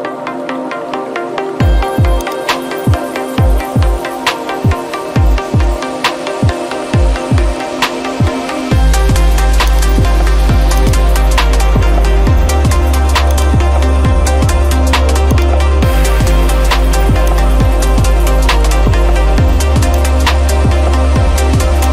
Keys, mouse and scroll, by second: 0.0-0.1 typing, 1.4 scroll, 2.2 scroll, 2.3 click, 4.2 scroll, 6.0-7.2 scroll, 7.4 scroll down 5, 7.9-8.4 scroll, 9.7-12.0 drag, 13.4-14.6 drag, 15.4 click, 17.4 click, 20.1 click.